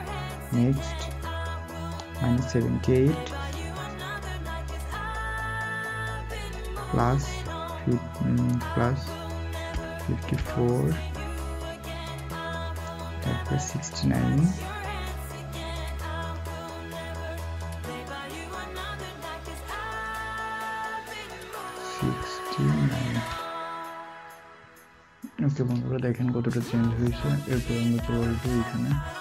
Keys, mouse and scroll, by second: 6.3-7.1 typing, 9.7-10.3 typing, 22.0 typing.